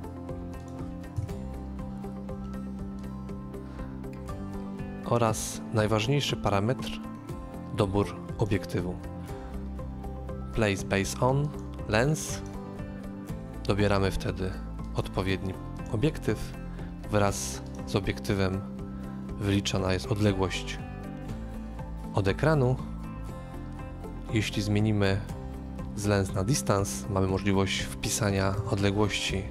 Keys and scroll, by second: 1.1 KP_0, 13.1 2, 28.4 typing.